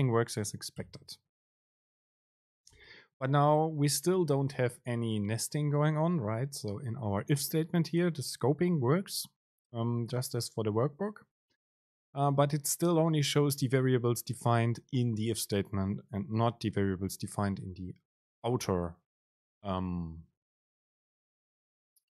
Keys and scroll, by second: 1.0 BackSpace, 1.6 Down, 2.8 BackSpace, 3.3 Down, 4.2 Return, 4.7 super+space.